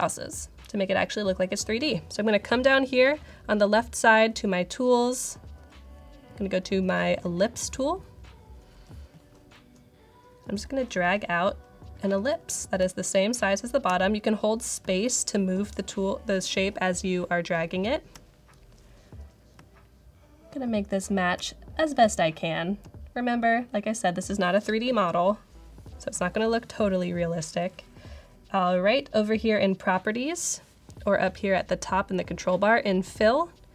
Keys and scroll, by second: 12.7-15.9 typing, 19.2-20.6 typing, 21.9-22.9 typing.